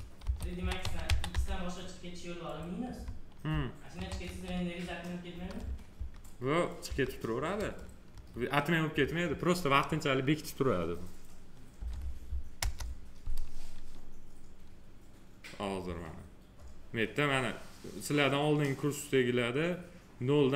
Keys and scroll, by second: 0.1 shift+p, 0.5 e, 3.9 3, 5.9 Left, 11.7 space.